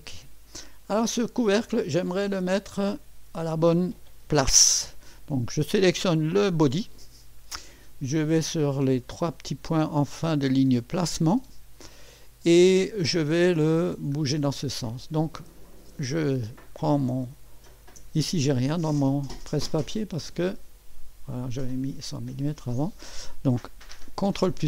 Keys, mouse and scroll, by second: 6.1 click, 9.4 click, 10.7 click, 17.7 ctrl+v, 20.3 click, 22.4 ctrl+v, 24.4 ctrl+v.